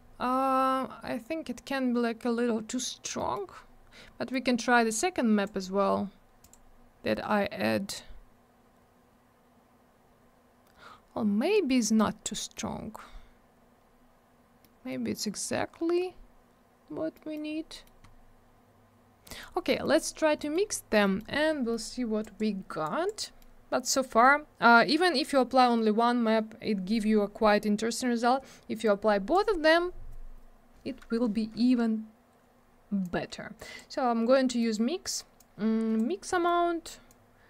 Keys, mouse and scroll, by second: 3.1 middle click, 3.3 scroll down 1, 3.4-4.3 scroll up 1, 4.3 click, 6.4 click, 6.5 click, 12.0 middle click, 14.6 middle click, 15.9 scroll up 1, 17.1 middle click, 17.5 scroll down 1, 17.7 middle click, 17.8 middle click, 18.0 scroll up 1, 19.3 middle click, 19.4 middle click, 19.7 middle click, 19.8 middle click, 20.4 middle click, 20.5 middle click, 20.7 scroll up 1, 21.0 middle click, 21.1 middle click, 21.4-21.7 scroll down 1, 21.7 middle click, 21.8 middle click, 22.2 click, 22.3 click, 22.8 click, 23.2 middle click, 23.4 middle click, 28.8 click, 31.3 scroll down 1, 33.0 click, 34.6 middle click, 34.7 middle click, 35.4 click, 36.3 middle click, 36.4 middle click, 36.7 scroll up 1, 37.1 click.